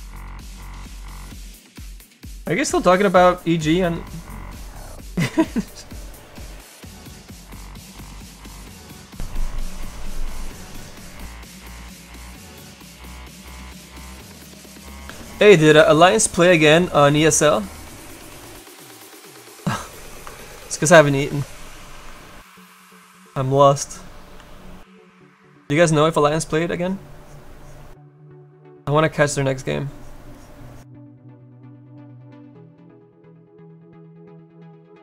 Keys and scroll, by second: 23.9 s, 24.4 s.